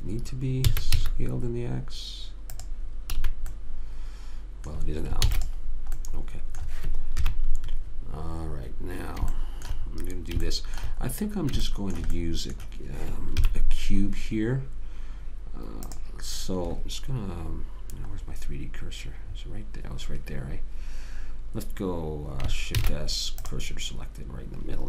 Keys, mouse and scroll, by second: 1.0 s, 3.5 a, 3.9 middle click, 5.6 ctrl+s, 7.5 KP_3, 13.7 KP_3, 17.1 click, 18.6-19.7 middle drag, 23.1 shift+s.